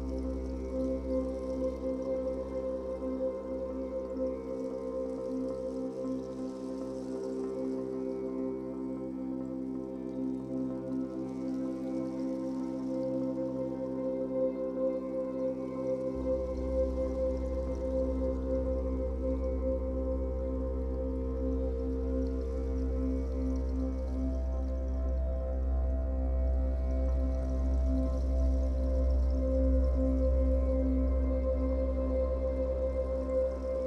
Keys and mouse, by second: 0.0 click, 1.6 click, 2.9-4.2 drag, 4.8-5.7 drag, 6.9-13.9 drag, 15.9 click, 17.4 click, 17.8-19.1 typing, 20.2 click, 21.1 click, 23.4 click, 24.3 click, 25.2-25.9 typing, 29.4 BackSpace, 30.8 click, 32.0 click, 32.8 click.